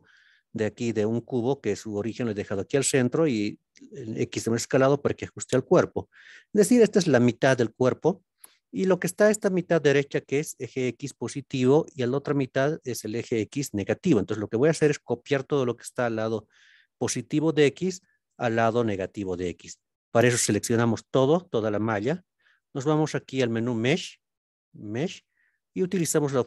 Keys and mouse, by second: 23.0-26.4 drag.